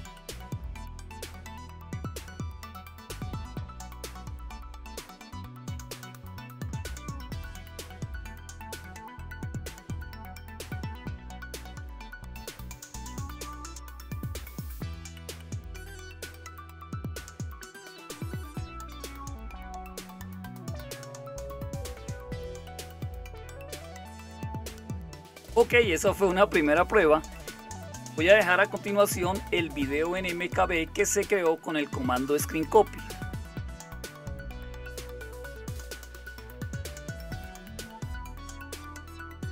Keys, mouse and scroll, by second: 37.9 super+q, 38.6-39.5 typing.